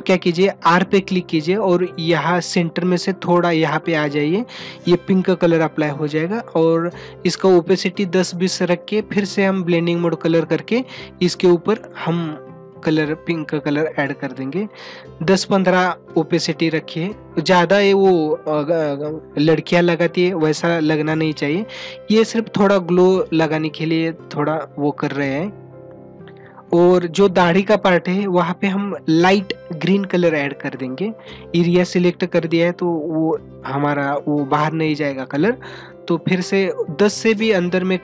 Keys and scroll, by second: 11.8 ctrl+alt+z, 34.2 ctrl+alt+z.